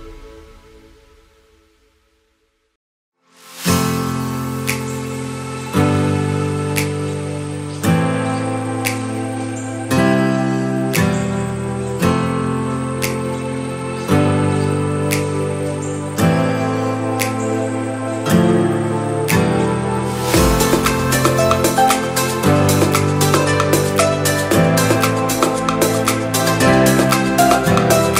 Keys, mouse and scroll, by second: 0.6-1.6 drag, 2.7 click, 3.1-5.6 drag, 6.8 click, 7.5-8.1 scroll down 1, 8.1-11.3 middle drag, 13.2-13.8 scroll up 2, 13.8-15.3 middle drag, 15.5 click, 15.7 Tab, 16.3-17.2 middle drag, 17.9 click, 18.3 middle click, 19.2 ctrl+click, 20.0 KP_1, 20.8 shift+middle click, 22.5 g, 26.0 click, 26.4-28.1 middle drag.